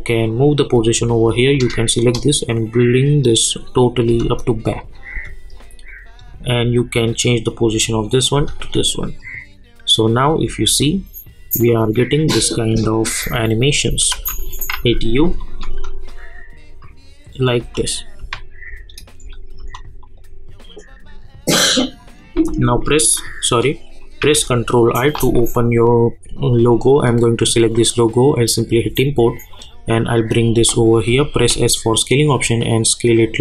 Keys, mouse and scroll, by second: 2.0 shift+click, 2.8-4.1 drag, 4.1 space, 5.9-8.3 drag, 8.3 space, 12.3 space, 13.7 click, 13.8 space, 14.3 space, 14.7 u, 15.4 click, 15.7 space, 17.6 space, 20.0 click, 24.2 ctrl+i, 27.0 click, 30.5 space, 31.3 s, 32.2-33.4 drag.